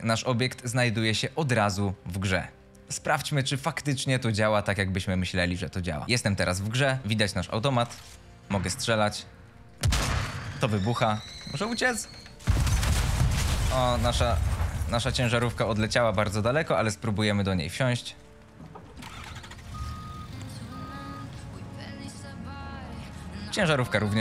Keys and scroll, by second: 0.1 d, 0.9 s, 2.7 a, 3.1 s, 6.7-9.1 typing, 18.8 e, 19.3 s, 21.3 w, 23.4 d.